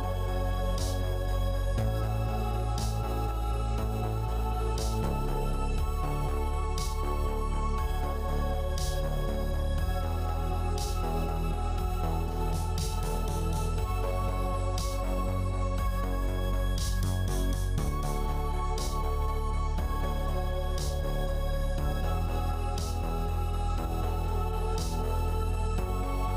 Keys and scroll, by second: 15.6 5.